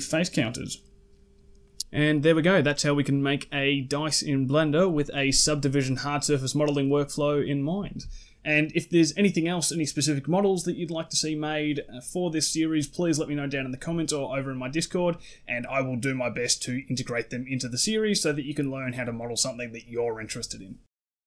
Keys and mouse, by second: 1.4-3.5 middle drag, 6.3-6.7 ctrl+middle drag, 7.3-7.8 shift+middle drag, 8.3-9.1 middle drag.